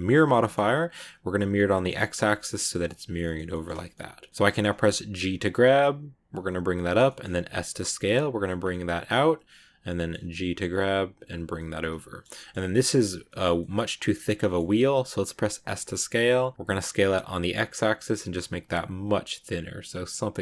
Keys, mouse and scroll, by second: 0.3-3.0 shift+middle drag, 3.0 scroll down 1, 3.0 scroll up 1, 3.1-5.0 shift+middle drag, 5.0 g, 6.9-7.3 scroll up 1, 7.3 s, 8.6-10.2 middle drag, 10.2 g, 11.5-15.6 middle drag, 15.6 s.